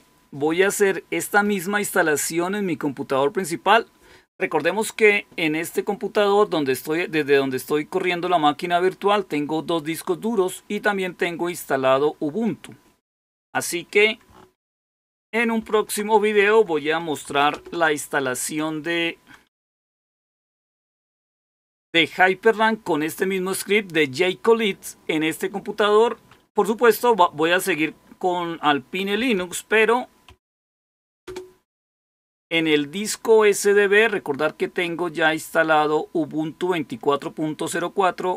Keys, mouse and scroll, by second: 13.5 click, 15.5 super+9, 17.4 super+Return, 19.4-20.5 typing, 20.6 Return, 29.0-31.0 typing, 31.2 Return, 34.8-37.7 drag.